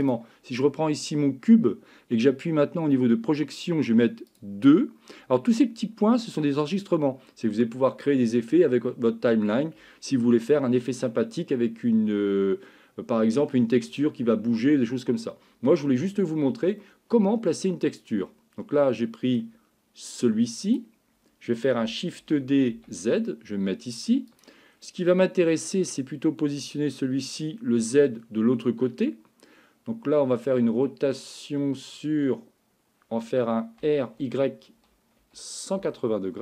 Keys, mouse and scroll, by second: 0.0 click, 4.3 click, 16.8-19.4 middle drag, 20.7 click, 22.2 shift+d, 25.1-27.4 middle drag, 33.8 r.